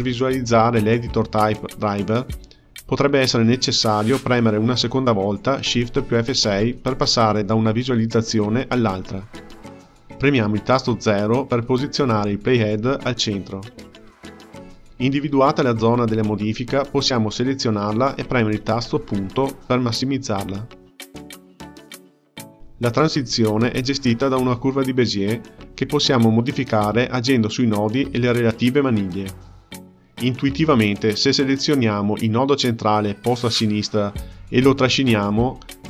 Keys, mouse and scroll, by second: 9.7 KP_Decimal, 10.9 KP_0, 13.9-17.0 ctrl+middle drag, 17.4-19.6 drag, 19.6 KP_Decimal, 31.0 click, 32.5 click, 33.7 g.